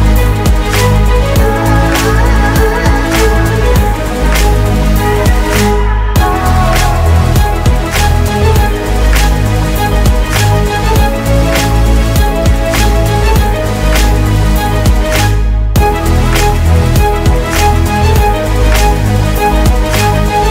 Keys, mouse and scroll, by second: 1.4 shift+click, 19.2 shift+click, 20.2 typing.